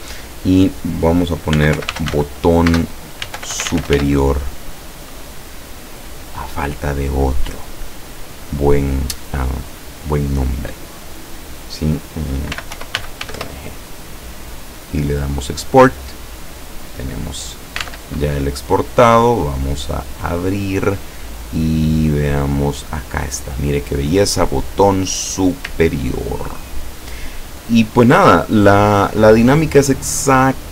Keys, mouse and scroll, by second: 1.3-4.5 typing, 12.3-13.8 typing, 15.1 click, 17.9 alt+Tab, 19.2 click, 20.1 click, 22.9 click, 24.2 click, 25.9-26.4 ctrl+scroll up 2.